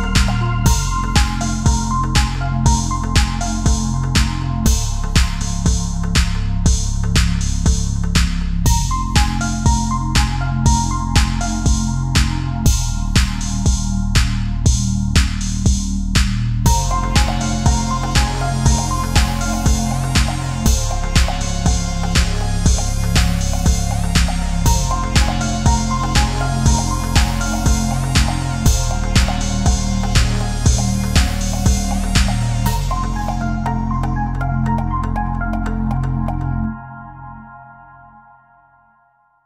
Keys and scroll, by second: 7.1 ctrl+c, 7.3 ctrl+v, 7.5 ctrl+z, 12.7 Right, 12.9 Left, 13.2 Up, 13.2 Right, 13.4 Up, 14.0 ctrl+a, 14.9 ctrl+a, 16.0 Delete, 16.4 Right, 17.0 ctrl+a, 18.6 Delete, 18.9 ctrl+a, 19.9 Delete, 20.2 ctrl+z, 20.4 ctrl+-, 20.8 ctrl+0, 21.0 space, 21.4 Delete, 22.0 Delete, 23.3 space, 25.1 ctrl+=, 25.3 space, 28.2 ctrl+c, 28.4 ctrl+z, 28.8 ctrl+c, 29.0 ctrl+v, 31.8 Left, 31.9 Right, 32.6 Left, 33.1 Down, 33.2 Right, 33.3 Down, 33.8 ctrl+=, 33.9 space, 34.6 ctrl+v, 35.2 ctrl+v, 38.0 ctrl+c, 38.2 ctrl+z, 38.5 ctrl+c, 39.2 ctrl+z.